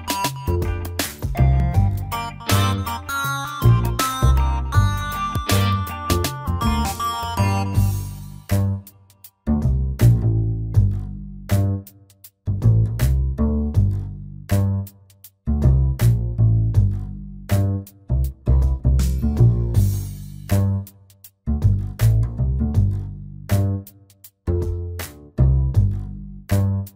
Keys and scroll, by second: 16.7 ctrl+z.